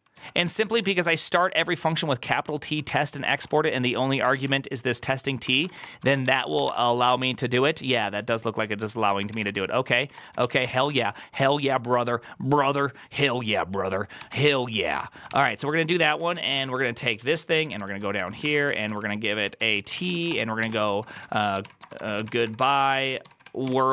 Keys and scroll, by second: 0.0 ctrl+u, 0.1-1.2 typing, 2.7 ctrl+c, 2.9-6.4 typing, 6.5 Return, 9.0 ctrl+a, 9.1-11.8 typing, 9.4 ctrl+c, 9.5 ctrl+c, 10.9 Return, 14.0 c, 14.9 Tab, 15.1-23.9 typing.